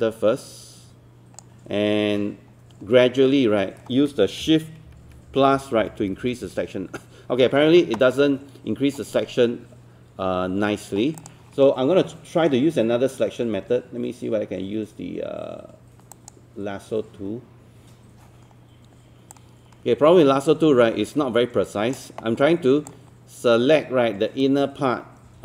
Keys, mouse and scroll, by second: 9.2-11.2 scroll down 1, 11.2-25.4 drag.